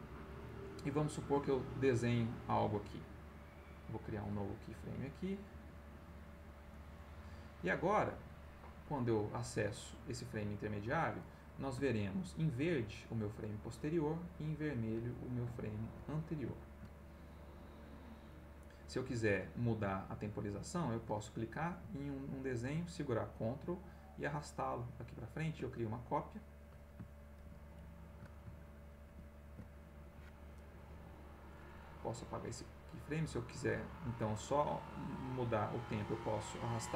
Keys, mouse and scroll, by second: 0.3 click, 2.9-4.0 right drag, 5.1 click, 6.2 click, 6.7 click, 8.1 click, 11.4-12.4 middle drag, 14.1 middle click, 15.1 middle click, 16.1 ctrl+middle click, 21.0 click, 23.5-25.2 ctrl+drag, 27.5 ctrl+x, 29.1 ctrl+z, 31.2-32.4 right drag, 33.0 click, 34.1-35.4 drag, 36.7 click.